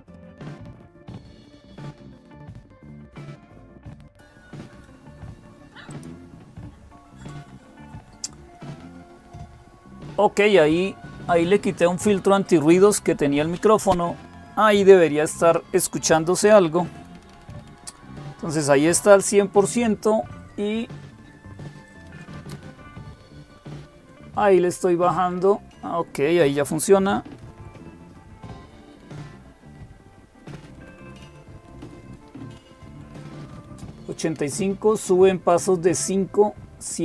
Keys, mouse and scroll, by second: 0.9 click, 2.2 Delete, 3.8 click, 5.7-8.3 drag.